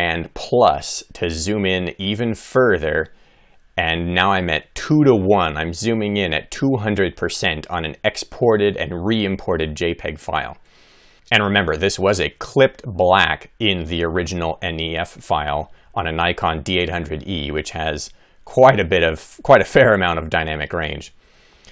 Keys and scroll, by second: 13.9 Left, 20.8 Left.